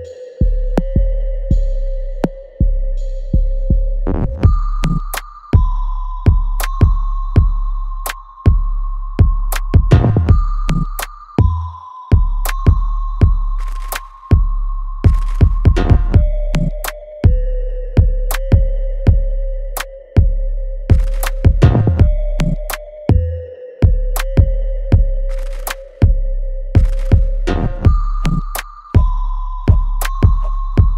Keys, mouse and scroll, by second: 3.7 ctrl+z, 6.5 right click, 8.1 click, 13.3 click, 15.0 click, 15.8-17.4 right drag, 17.4 click, 20.2-25.8 drag, 25.8 right click, 27.4-30.9 drag.